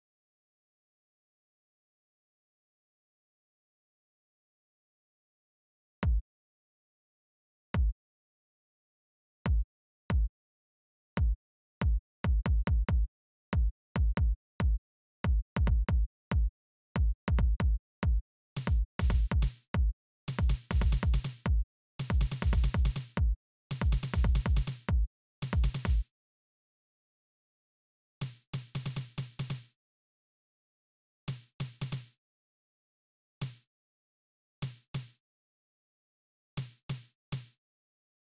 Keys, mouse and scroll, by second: 1.0 right click, 2.1 click, 3.1 click, 4.0 click, 4.9 click, 9.3 click, 10.5 click, 11.4 click, 11.9 click, 13.5 right click, 14.2 click, 15.0 click, 15.7 right click, 16.8 click, 17.2 click, 17.7 click, 18.5 click, 19.7 click, 20.2 click, 21.9 click, 23.9 right click, 25.4 click, 25.7 space, 27.1 click, 27.7 space, 29.4 space, 29.9 right click, 30.8 space, 31.9 space, 32.1 right click, 32.9 space, 33.6 space, 33.7 click, 36.5 click, 37.7 space, 38.1 click.